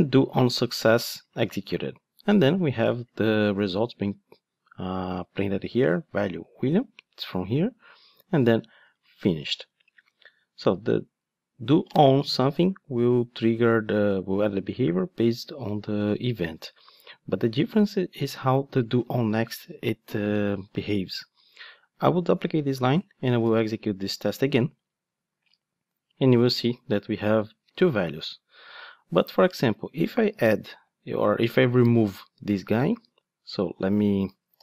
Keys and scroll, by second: 20.8 super+d, 23.4 ctrl+d, 30.3 super+d, 32.7 ctrl+d, 34.5 super+d.